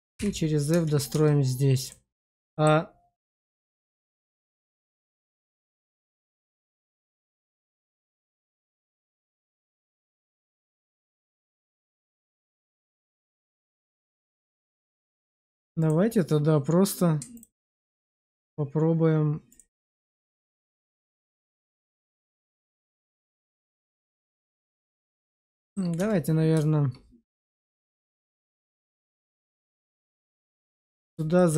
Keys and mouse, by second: 0.7 Tab, 0.7 f, 0.7 BackSpace, 1.0 Tab, 2.4 middle click, 3.2 shift+middle click, 4.3 shift+middle click, 4.8 middle click, 5.3 click, 6.4 Tab, 6.9 shift+click, 7.3 click, 8.1 shift+click, 9.1 shift+middle click, 9.8-13.2 middle drag, 13.6 shift+middle click, 14.0 middle click, 15.0 shift+middle click, 15.3 Tab, 17.2 ctrl+click, 18.1 click, 19.6 click, 21.1 ctrl+x, 22.7 middle click, 23.1 shift+middle click, 23.9 middle click, 24.5 shift+middle click, 25.5 shift+middle click, 25.9 Tab, 28.4 shift+click, 29.0 1, 29.8 click, 30.4 shift+click, 30.7 1, 31.3 shift+middle click.